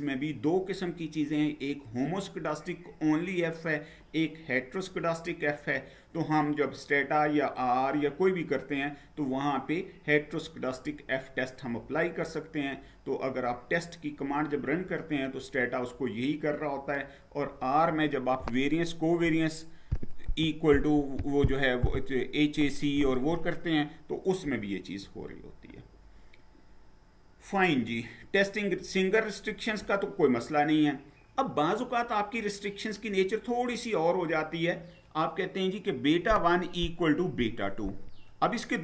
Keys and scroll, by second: 25.0 Down.